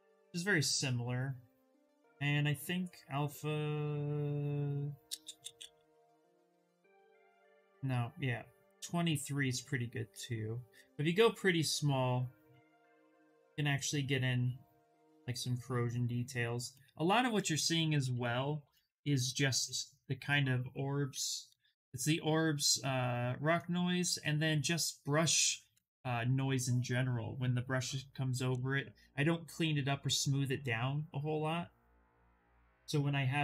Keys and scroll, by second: 9.6 s, 12.3 s, 17.2 ctrl+z, 17.4 ctrl+z, 17.6 ctrl+z, 17.8 ctrl+z, 18.0 ctrl+z, 18.3 ctrl+z, 18.5 ctrl+z, 18.9 ctrl+z, 19.2 ctrl+z, 20.8 b, 21.1 o, 25.3 ctrl+z, 29.7 s.